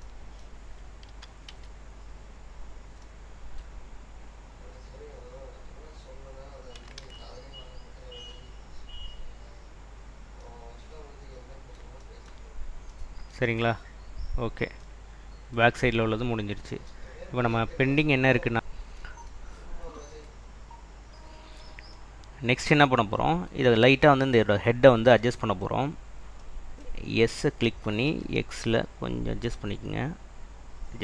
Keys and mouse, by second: 1.2 s, 1.6 y, 6.0 click, 7.1 ctrl+z, 7.9 click, 13.8 click, 17.6-18.7 middle drag, 25.2 middle drag, 27.6 s, 28.2 x, 30.9 click.